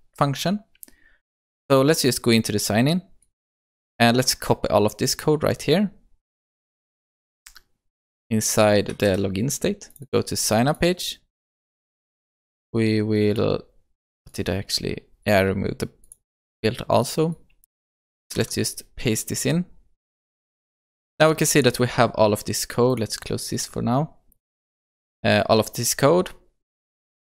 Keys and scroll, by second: 9.0 ctrl+c, 18.3 ctrl+v.